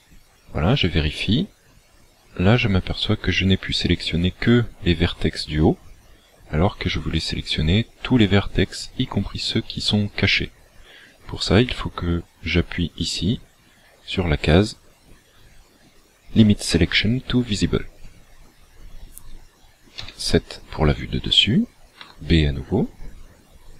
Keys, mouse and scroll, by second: 18.0 click, 20.0 KP_7, 22.1 b.